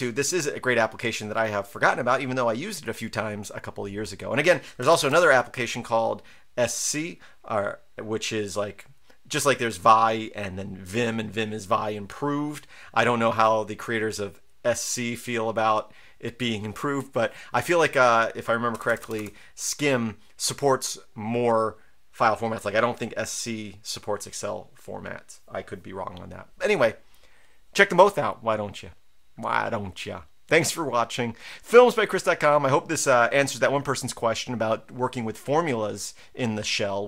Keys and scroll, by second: 4.8-5.1 typing, 18.7 BackSpace, 18.9 BackSpace, 19.0 BackSpace, 19.1 BackSpace.